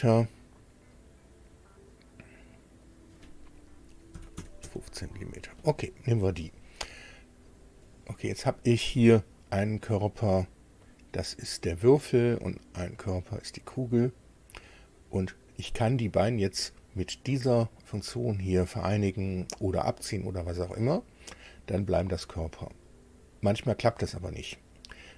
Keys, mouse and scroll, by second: 2.9 click, 4.1 KP_1, 4.4 KP_5, 4.6 Tab, 7.9 click, 10.8 click, 13.0 click, 15.2 click, 24.9 click.